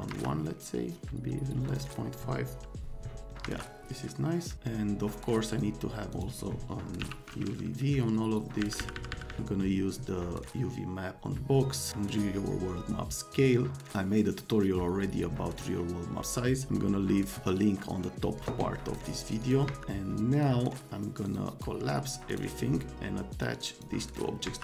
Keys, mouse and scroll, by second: 0.0 scroll up 2, 0.1 F3, 1.7 middle click, 1.8 click, 3.4 F3, 3.5 middle click, 5.5 click, 6.1 click, 7.0 t, 8.6 Down, 8.8 Down, 8.9 Down, 9.1 Down, 9.2 Down, 14.8 middle click, 19.4 click, 19.6 F3, 20.3 click, 21.3 click, 21.6 right click, 22.3 click, 23.3 click, 23.8 click, 24.2 right click, 24.4 F3.